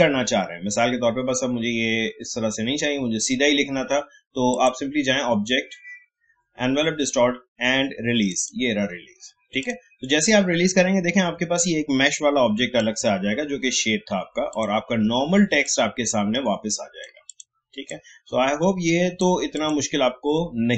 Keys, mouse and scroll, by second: 4.5 click, 8.2-14.5 drag, 15.6-20.7 alt+shift+drag.